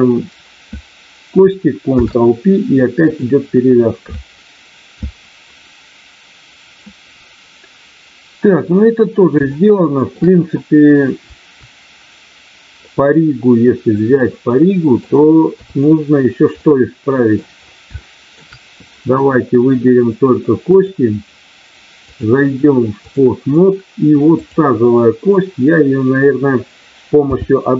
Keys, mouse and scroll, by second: 1.9 ctrl+p, 9.5 shift+middle click, 12.8-15.0 middle drag, 15.5 KP_3, 16.5 middle click, 18.0 shift+middle click, 20.6 click, 22.0-23.1 drag, 24.2 click, 27.2 n.